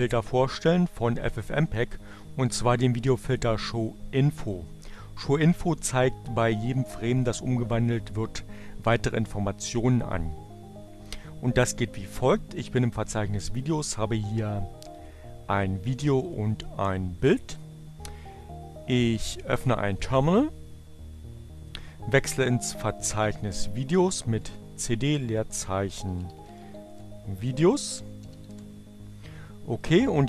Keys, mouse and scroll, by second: 14.1 click, 14.8 click, 16.1 click, 16.8 click, 21.9-23.4 drag, 23.6 c, 24.7-29.3 typing.